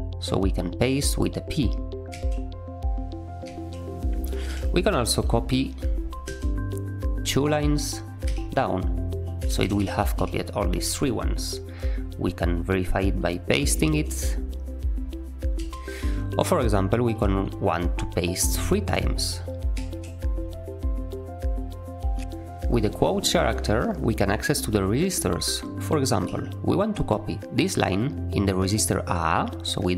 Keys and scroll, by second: 2.0 typing, 3.4-4.4 typing, 6.2-7.1 typing, 8.2 typing, 9.4-10.6 typing, 10.7 Escape, 13.7 p, 15.5 u, 18.8 3, 19.6 p, 26.2 j.